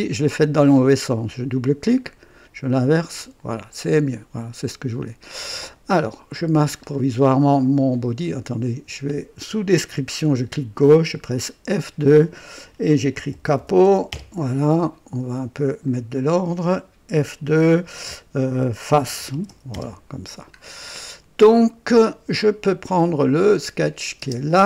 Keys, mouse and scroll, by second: 0.8 click, 2.0 click, 3.1 click, 3.8 click, 4.2 click, 6.7 scroll up 1, 7.5 click, 8.4 click, 9.7 click, 11.6 F2, 12.6-14.3 typing, 15.8 click, 17.0 typing, 18.6-19.9 typing, 20.6 scroll down 1, 21.9 typing, 23.0 click, 23.4-24.2 typing, 23.7 click.